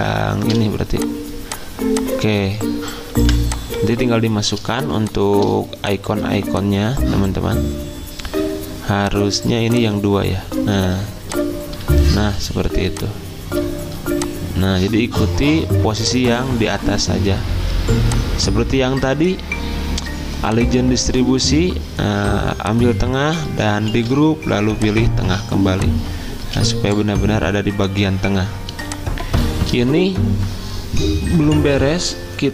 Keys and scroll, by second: 3.9 Escape, 23.9 ctrl+g, 26.4 z, 28.7 alt+Tab.